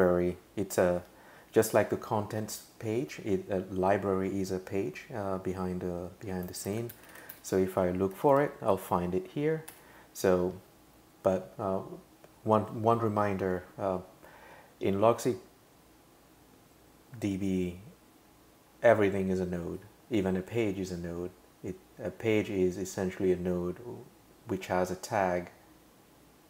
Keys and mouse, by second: 6.4-7.8 typing, 8.1 Down, 8.3 Down, 8.7 Up, 9.7 Return.